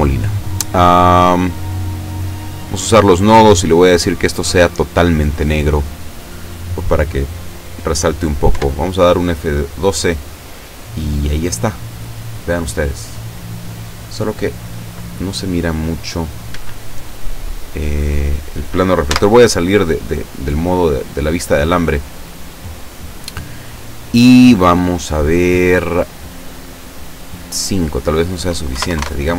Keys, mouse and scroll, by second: 1.4 click, 2.4 click, 3.3 click, 3.9 click, 4.9 click, 8.5 F12, 16.6 Escape, 17.9 scroll down 2, 19.1 z, 20.3-20.6 scroll up 2, 20.9 scroll down 2, 22.1 right click, 26.6 click, 27.5 click, 28.7 KP_1, 28.9 KP_0, 29.0 KP_Enter.